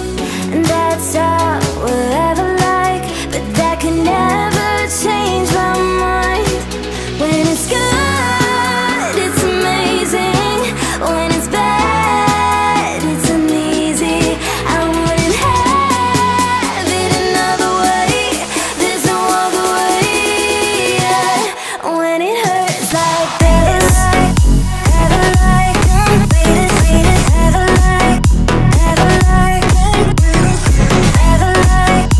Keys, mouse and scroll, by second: 1.2 alt+scroll up 1, 3.1 click, 3.6 alt+scroll down 1, 5.2 click, 8.6 click, 13.8 click, 18.1 alt+scroll down 1, 18.8 alt+scroll up 1, 19.5 click, 24.3 Delete, 26.5 ctrl+z, 27.6 click, 31.6-32.1 shift+drag.